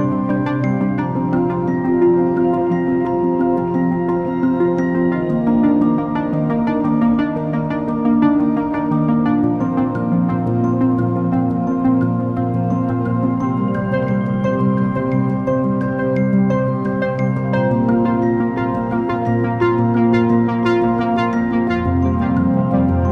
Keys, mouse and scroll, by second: 8.1 alt+shift+click.